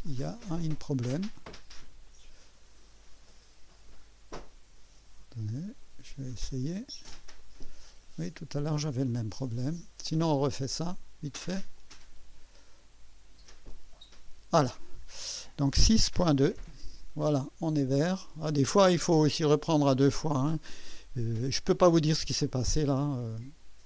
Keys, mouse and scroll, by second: 0.4 right click, 2.1-5.0 drag, 7.4-8.9 drag, 10.4 click, 11.7 click, 13.6 click, 15.7 KP_6, 16.0 KP_Decimal, 16.5 KP_2, 16.6 KP_Enter, 16.6 Return, 18.1 right click, 19.1 right click, 19.8 typing, 22.0-22.8 right drag.